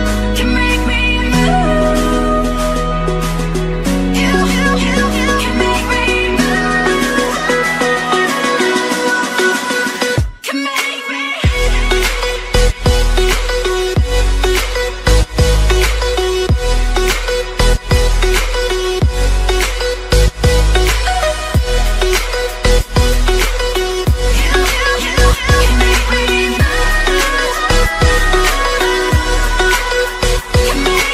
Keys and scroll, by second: 0.8 ctrl+t, 23.4 ctrl+t.